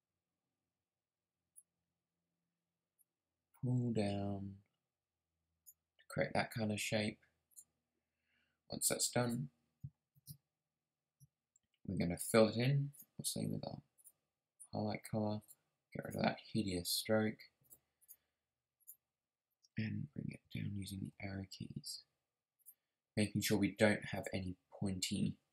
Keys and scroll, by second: 20.0 Down, 20.4 Left, 21.0 Down, 21.8 Up.